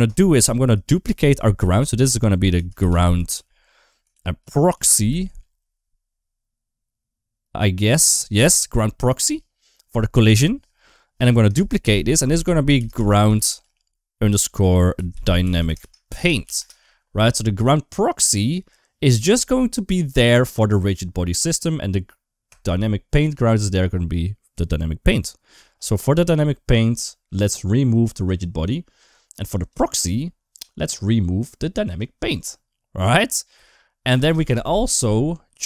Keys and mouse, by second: 0.6 right click, 1.5 F2, 11.4 shift+d, 12.1 F2, 22.3 click.